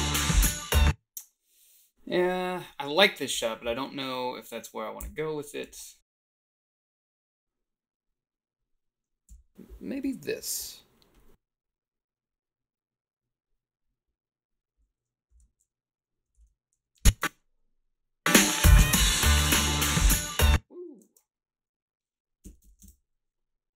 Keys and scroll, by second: 0.7 space, 5.0 h, 5.7 a, 9.3 f, 15.4 a, 16.4 ctrl+r, 16.8 a, 17.2 space, 20.3 space, 22.4 1, 22.8 0.